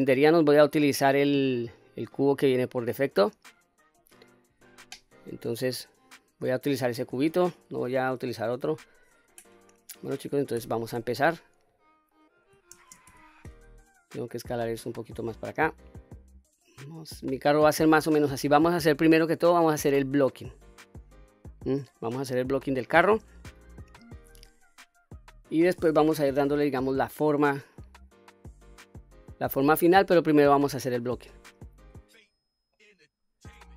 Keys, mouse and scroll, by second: 3.3-4.5 scroll down 1, 4.5 Tab, 5.4-6.0 scroll up 1, 6.2-8.3 scroll down 1, 8.6 KP_3, 9.3 scroll up 1, 10.6 q, 11.6 scroll down 1, 12.7 shift+space, 14.2-18.4 drag, 19.1 middle click, 20.4-21.1 scroll down 2, 21.1 middle click, 24.2 q, 24.8 middle click, 26.0 KP_1, 26.6-27.3 scroll up 2, 27.7-30.8 drag, 31.3-31.9 middle drag, 32.3-32.6 scroll down 1, 32.7 middle click.